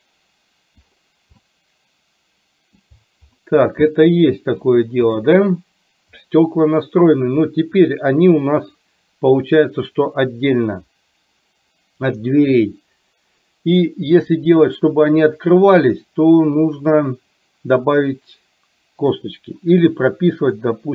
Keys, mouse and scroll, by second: 1.7-3.1 middle drag, 4.1 middle click, 5.3 drag, 8.7 click, 14.4-19.4 middle drag, 20.7 middle click.